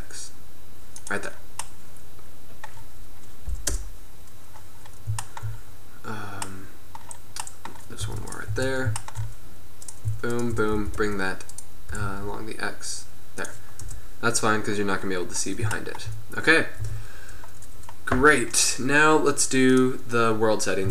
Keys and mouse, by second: 1.3-1.8 drag, 2.4-3.8 middle drag, 3.8 KP_0, 7.3 middle click, 7.5 middle click, 7.8 middle click, 8.2 Tab, 8.7 Tab, 10.8 g, 12.0 g, 13.9 KP_0, 17.0 Tab.